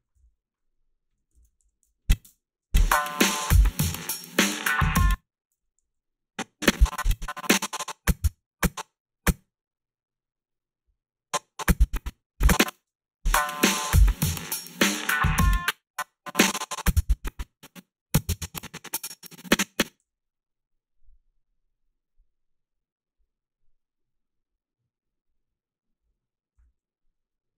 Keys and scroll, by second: 1.3 ctrl+r, 2.2 space, 4.9 space, 5.5 h, 5.8 a, 12.7 space, 15.4 space, 20.0 f.